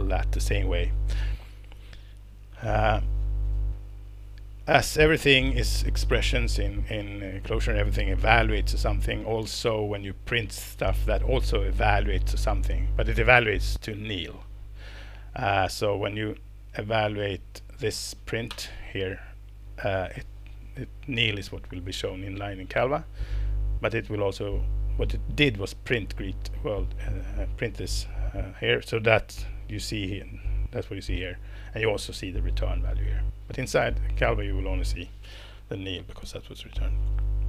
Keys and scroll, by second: 18.5 alt+Return, 36.2 Escape.